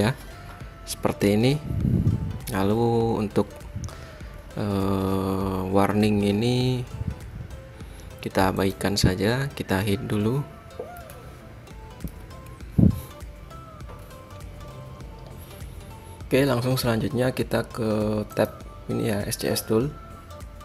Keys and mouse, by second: 1.5-6.6 middle drag, 11.3 KP_3, 12.4 KP_5, 18.7-20.2 drag.